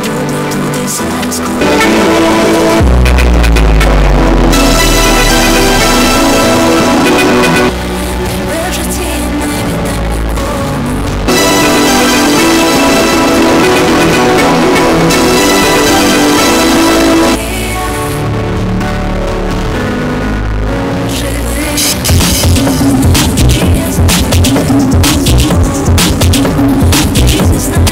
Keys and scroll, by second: 8.1 Page_Down, 17.7 Page_Down.